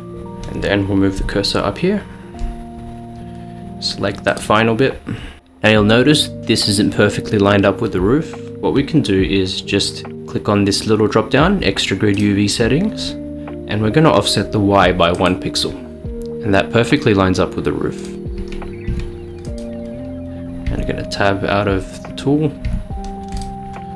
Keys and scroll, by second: 1.3-2.0 s, 2.1 s, 2.2 s, 2.4 s, 18.9 Tab, 20.7 Tab, 22.7 Tab.